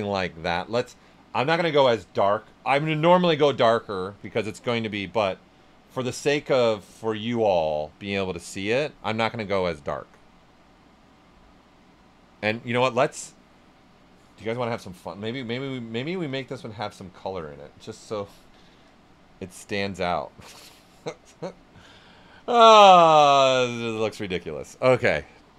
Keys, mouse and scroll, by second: 1.8-3.5 drag, 3.5-7.0 drag, 9.4-15.3 right drag, 15.3-18.0 drag, 21.9 click, 25.3-25.5 right drag.